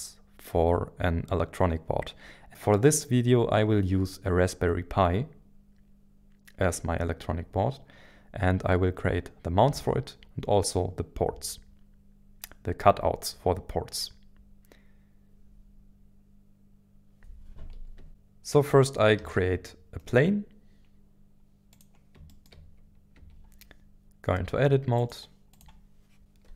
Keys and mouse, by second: 18.1 shift+a, 22.3 shift+middle drag, 23.1 Tab, 25.0 click, 25.5 click, 26.2 ctrl+z.